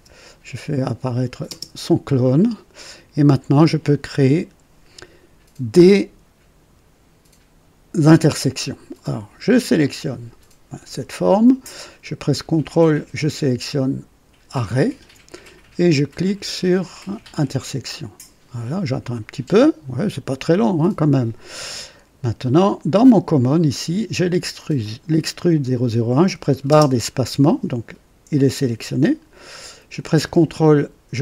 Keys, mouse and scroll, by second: 0.7 click, 1.4 typing, 2.2-3.8 drag, 9.7 click, 14.5 ctrl+click, 17.2 click, 23.4 click, 24.7 click, 26.6 space, 26.7 space.